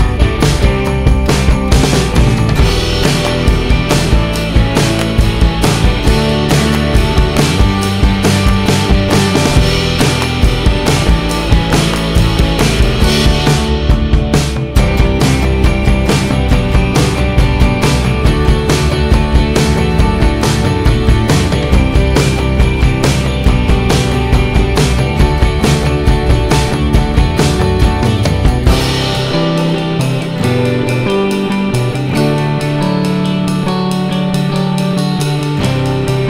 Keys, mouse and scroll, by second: 1.3 click, 1.5 click, 4.5-5.3 typing, 6.5 Return, 8.1 click, 8.2 click, 9.0 middle click, 9.5 middle click, 9.6-10.2 scroll down 1, 10.5 alt+middle click, 12.8 ctrl+click, 12.9 ctrl+click, 14.0 ctrl+click, 15.0 ctrl+click, 16.9 ctrl+click, 17.7 middle click, 18.1 scroll up 1, 18.7-19.3 scroll up 1, 19.3 middle click, 20.8 Delete, 20.8 middle click, 21.4 F4, 23.3 alt+middle click, 23.8 alt+middle click, 24.1 F4, 25.5 F2, 26.0 F3, 26.8 F3, 27.2 click, 29.2 click, 30.9 click, 32.4 q, 32.8 click, 33.7 click, 35.7 Delete.